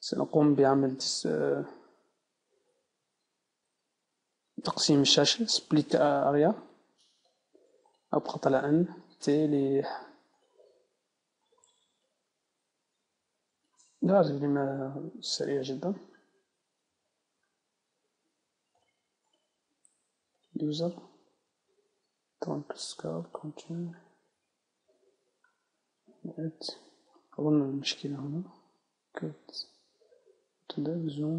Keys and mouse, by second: 4.4-6.2 right drag, 7.9-12.1 drag, 9.1 n, 10.9 n, 17.3 middle click, 19.3-27.1 drag.